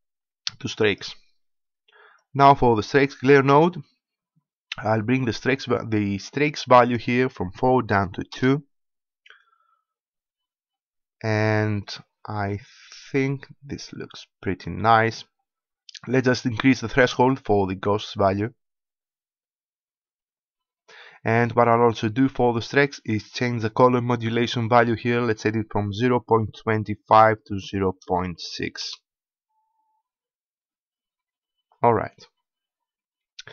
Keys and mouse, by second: 6.6-8.6 drag, 18.0-19.9 drag, 24.0-25.8 drag.